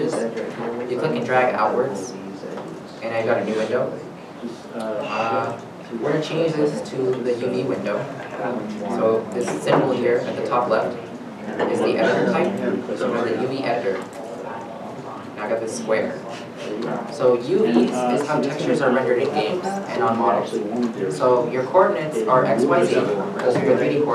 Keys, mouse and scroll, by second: 15.2 shift+middle click, 15.2-15.9 scroll up 1.